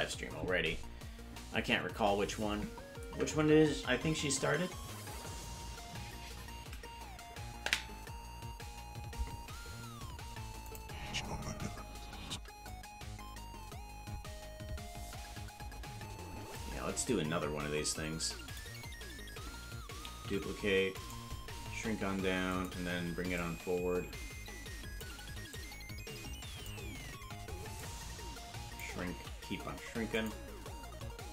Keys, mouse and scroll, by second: 10.7 click, 10.8 space, 12.7-16.6 drag, 18.4 click, 20.2 shift+d, 21.7 s, 23.3-25.0 shift+drag, 25.5-26.7 drag, 27.7-28.8 shift+drag, 29.1 s.